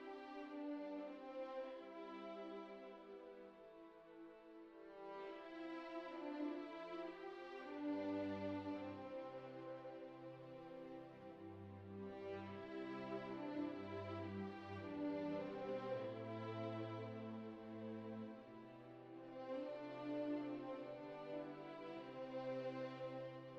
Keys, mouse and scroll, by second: 0.0 click, 0.4 click, 0.7 ctrl+Tab, 0.8 shift+middle click, 1.4 shift+middle click, 2.0 click, 2.2 shift+middle click, 2.5 alt+shift+z, 2.6 g, 3.7 alt+shift+z, 3.9 click, 4.4 s, 5.6 click, 6.0 s, 7.1 s, 7.7 ctrl+middle click, 7.9 ctrl+Tab, 8.1 click, 8.4 shift+middle click, 11.4 click, 13.0 click, 13.8 ctrl+Tab, 14.3 click, 15.1 click, 16.4 h, 17.2 shift+middle click, 17.6 middle click, 18.5 click, 20.3 click, 21.6 click, 23.1-23.5 middle drag.